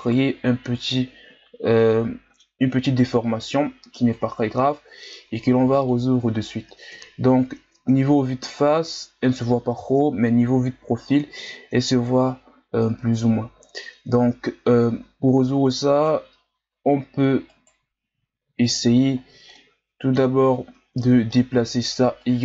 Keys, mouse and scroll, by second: 0.0 alt+right click, 1.4-1.8 scroll down 1, 1.8-3.3 middle drag, 3.3-4.4 drag, 4.4 ctrl+z, 5.8-6.9 drag, 6.9 KP_1, 7.8 Tab, 8.5-9.8 scroll down 2, 9.8 KP_3, 10.7 scroll up 2, 11.6-12.6 shift+scroll up 2, 13.1 Tab, 15.9 alt+right click, 17.6 alt+shift+right click, 18.6 alt+shift+right click, 19.2-19.5 scroll down 2, 19.5-22.2 middle drag, 22.2-22.4 drag.